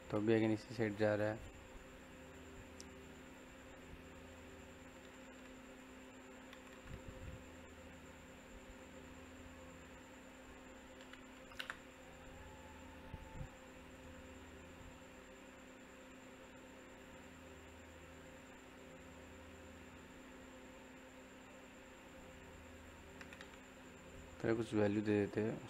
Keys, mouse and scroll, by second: 0.2 click, 1.2 scroll down 1, 1.3-4.3 middle drag, 4.3 scroll up 1, 4.5 middle click, 5.6 click, 10.1 click, 10.9-11.5 typing, 13.8 click, 16.2 scroll down 1, 22.8 click.